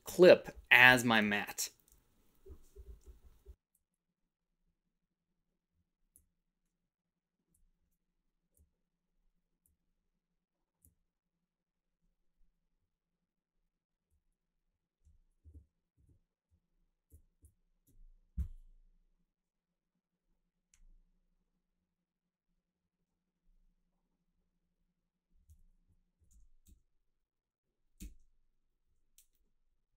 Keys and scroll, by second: 15.4 Down, 15.5 Down, 15.9 Down, 16.0 Down, 16.5 Up, 17.0 Up, 17.4 Down, 25.8 Up, 26.1 Up, 26.3 Up, 26.6 Up, 28.1 Up.